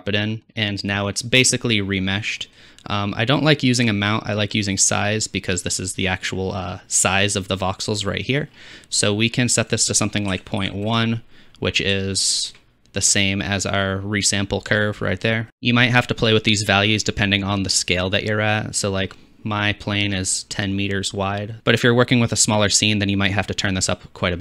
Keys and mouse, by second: 3.9 middle click, 3.9 right click, 19.5-20.4 drag, 20.4-21.6 middle drag.